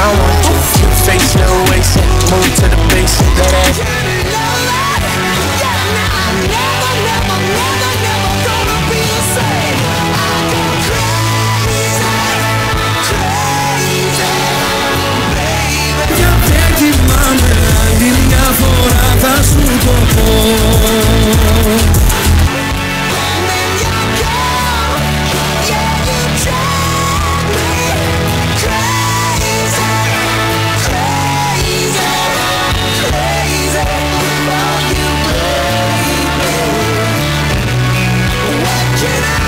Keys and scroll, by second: 4.3 Page_Down, 23.1 Page_Down.